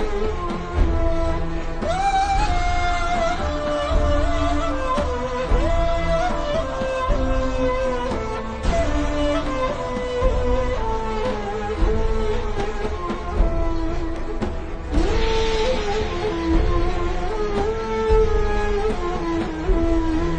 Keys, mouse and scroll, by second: 0.3 [, 0.9 click, 1.3 scroll down 1, 1.8 v, 2.0 click, 5.1 click, 5.6 v, 5.9 click, 6.7 alt+shift+scroll down 2, 7.0 z, 7.3 click, 7.7 ctrl+scroll down 1, 8.3 scroll down 1, 8.5 click, 9.3-10.2 ctrl+scroll down 1, 10.8 click, 11.1-11.5 alt+shift+scroll down 2, 11.5 scroll up 1, 11.7-12.2 ctrl+scroll down 2, 12.3-12.6 alt+shift+scroll up 2, 13.2-13.8 typing, 14.6 click, 15.5 alt+shift+scroll down 2, 15.9 scroll up 1, 16.1 click, 19.9 click, 20.2 alt+shift+scroll up 1.